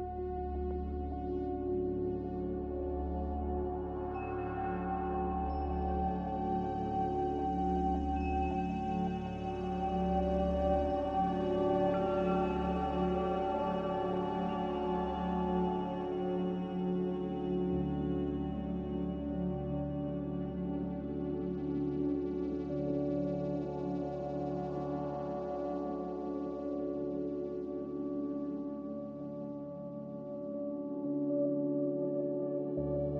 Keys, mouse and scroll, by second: 10.9 a.